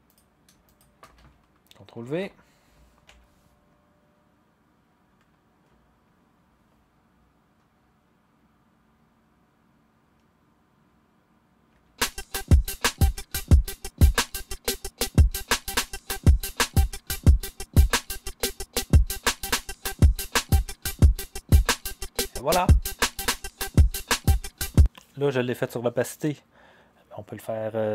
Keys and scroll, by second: 2.0 ctrl+v, 3.0 0, 11.7 0, 24.6 0.